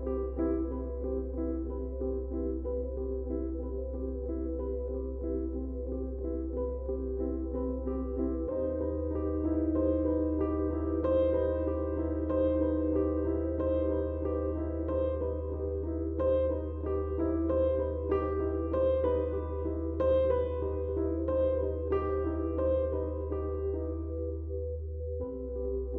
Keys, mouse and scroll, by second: 0.0 click, 0.3 space, 0.5 click, 0.8 space, 1.3 click, 2.5-4.8 drag, 7.7 click, 8.5-12.1 shift+drag, 12.5 space, 12.6 click, 13.1 space, 15.1-25.9 drag.